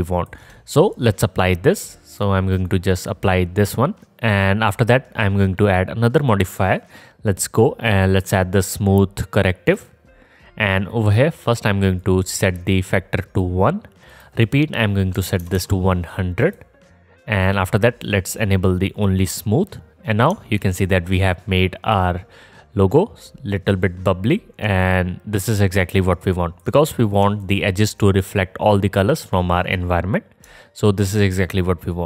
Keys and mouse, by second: 2.1-17.3 middle drag, 15.6 KP_0, 20.3-28.1 alt+drag.